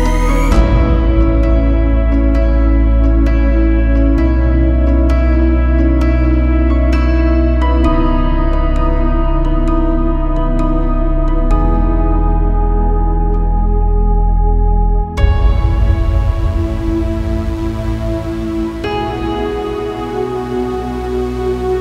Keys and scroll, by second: 11.1 Escape, 14.5 Escape, 18.4 Caps_Lock.